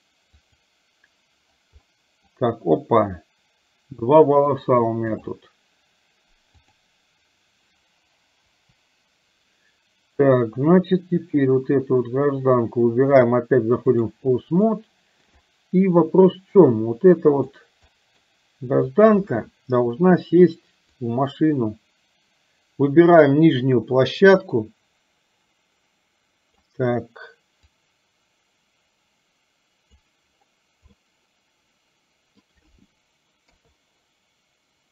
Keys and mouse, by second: 0.7 click, 1.8 middle click, 4.6-5.7 drag, 6.7 click, 8.6 Delete, 11.3 click, 13.3-14.4 drag, 14.7 shift+middle click, 15.4-17.6 middle drag, 18.1 middle click, 18.9 click, 20.9-27.1 drag, 27.7-30.3 drag, 31.1-32.4 middle drag, 33.4 KP_3.